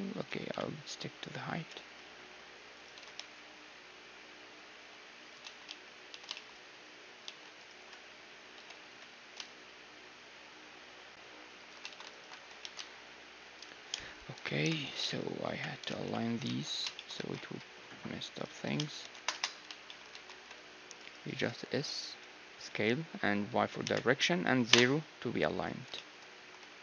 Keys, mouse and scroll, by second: 0.5 KP_3, 1.6 s, 2.9 s, 5.4 a, 5.6 z, 6.1 z, 6.3-8.4 middle drag, 7.2 z, 7.6-10.3 right drag, 8.6 s, 11.8 a, 12.1-14.0 right drag, 12.4 s, 14.6-17.3 typing, 16.7-18.6 middle drag, 18.6 click, 18.6 s, 19.0-20.1 right drag, 20.1 click, 20.1 a, 20.3 c, 20.4-22.1 middle drag, 21.3-23.6 drag, 21.3 s, 25.8-26.8 middle drag, 26.3-26.8 typing.